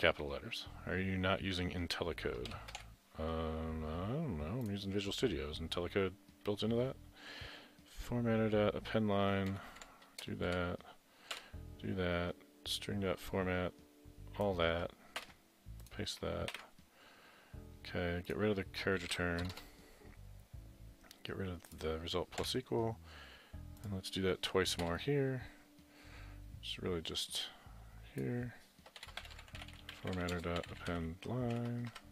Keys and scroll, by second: 2.5 shift+Down, 15.2 ctrl+x, 15.2 typing, 16.6 ctrl+v, 19.1 Right, 19.5 BackSpace, 19.6 BackSpace, 22.4 Delete, 24.9 Return, 29.0-32.1 typing.